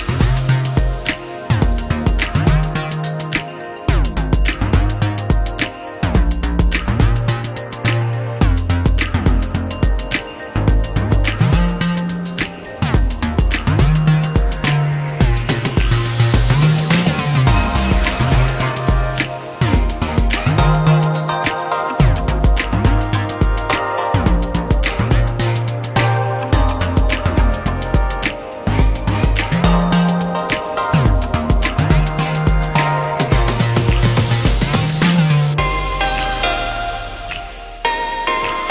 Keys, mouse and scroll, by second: 1.2 Tab, 2.0 a, 3.0-6.0 drag, 6.4 s, 11.9 Tab, 13.2 click, 13.8-15.5 scroll up 1, 15.5 click, 18.8 click, 19.8-22.9 drag, 24.3-26.3 drag, 26.4-28.1 drag, 28.1-28.5 scroll up 2, 28.7 scroll up 2, 30.5-30.9 scroll down 2, 31.4-33.1 scroll down 2, 33.1 click, 34.2 click, 35.5-38.7 drag.